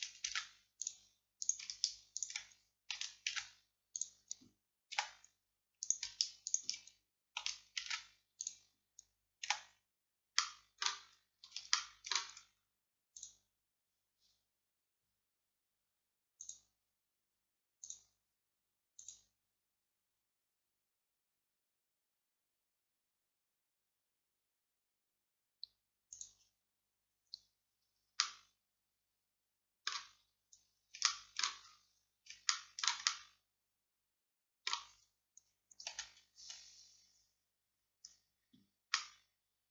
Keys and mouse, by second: 5.0 z, 7.9 alt+m, 9.5 z, 20.8-28.3 middle drag, 30.2 click, 30.6-31.7 middle drag, 31.7-35.9 drag, 35.9 a, 36.5 a, 39.0-39.7 drag.